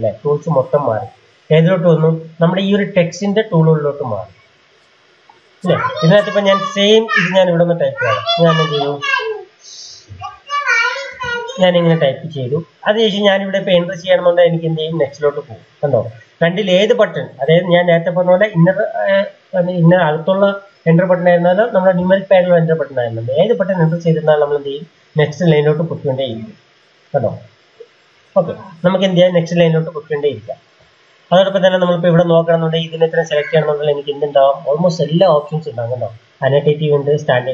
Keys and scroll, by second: 7.5-11.5 typing, 13.8 Return, 17.1 Return, 24.1 Return, 24.6 Return, 25.5 Return, 26.2 Return, 26.4 Return, 27.8-28.9 typing.